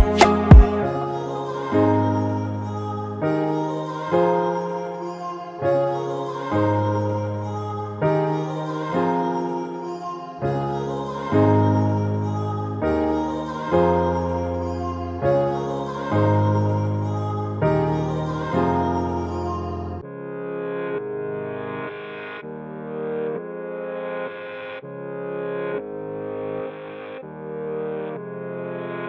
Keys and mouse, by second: 2.3 5, 3.0 Return, 5.6 click, 8.2 click, 10.2-11.5 drag, 11.5 5, 12.5 Return, 16.1 click, 20.9 click, 23.4 click, 27.5 click.